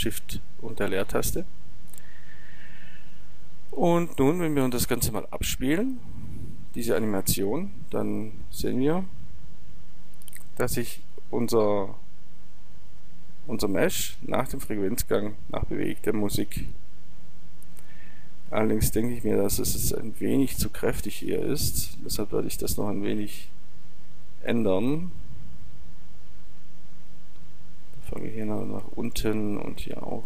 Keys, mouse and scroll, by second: 6.1-9.8 drag, 20.4-30.2 drag.